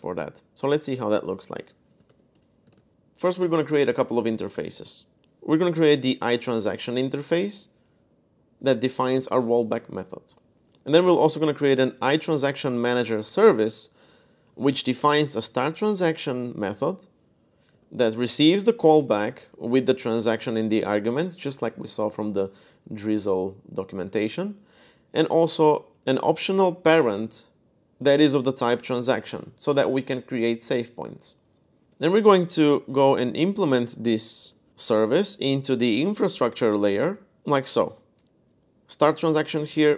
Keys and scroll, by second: 0.5 super+Tab, 1.6-6.7 typing, 8.4-9.1 typing, 9.3 Escape, 10.2-12.5 typing, 14.0-15.4 typing, 17.5 typing, 19.3-20.2 typing, 24.7-26.2 typing, 27.8-28.2 typing, 31.6-33.2 typing, 33.9 Up, 34.2 Return, 37.5 j, 38.8-39.9 typing.